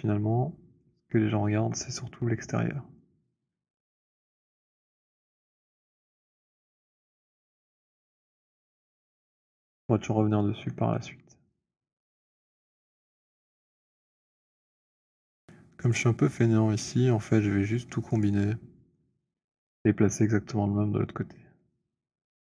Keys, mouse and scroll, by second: 1.0 alt+click, 1.7 alt+click, 1.9 alt+click, 3.6 middle click, 3.6 alt+right click, 4.5 alt+click, 5.5 alt+right click, 5.5-5.8 scroll, 6.2 click, 9.6 alt+right click, 9.8-10.3 scroll, 10.6 click, 14.8 click, 18.2 shift+click.